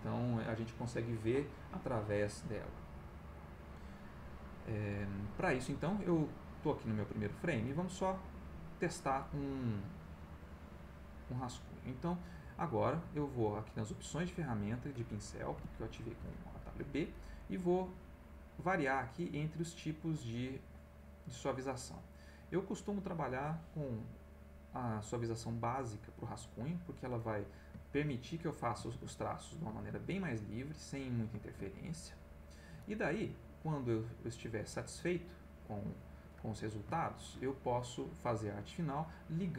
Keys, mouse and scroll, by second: 12.9 click, 15.5 b, 18.2-25.7 drag, 26.7 click, 27.9 ctrl+z, 28.1 ctrl+click, 28.9 ctrl+z, 29.1 ctrl+click, 29.8 ctrl+z, 29.9 ctrl+click, 31.4 ctrl+z, 31.9 ctrl+click, 33.7 click, 34.3 click, 35.2 click, 35.6 click, 36.4-37.5 middle drag.